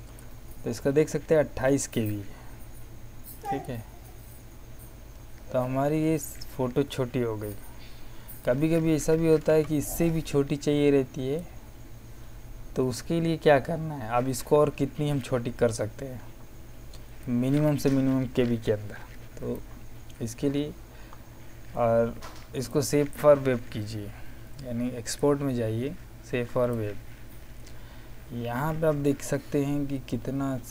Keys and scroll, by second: 9.4 z.